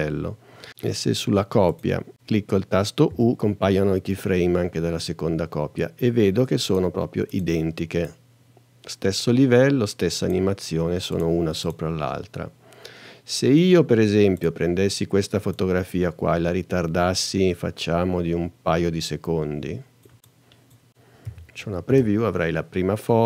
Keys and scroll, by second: 3.1 u, 21.3 n, 21.9 space.